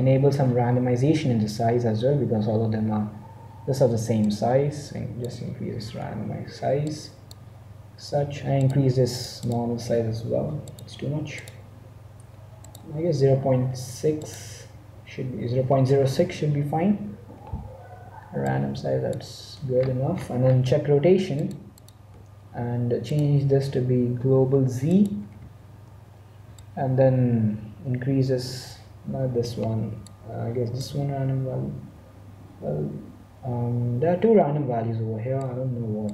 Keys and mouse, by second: 4.2-5.9 drag, 7.3-8.6 drag, 8.7-15.9 drag, 18.5-19.7 drag, 19.7-21.6 middle drag, 21.6-24.7 drag, 26.6-28.3 drag, 30.7-32.4 drag, 36.0-36.1 drag.